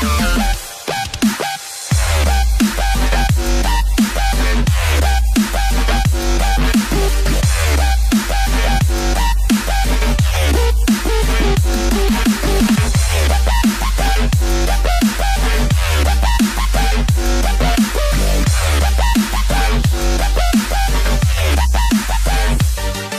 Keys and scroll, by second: 9.1 space.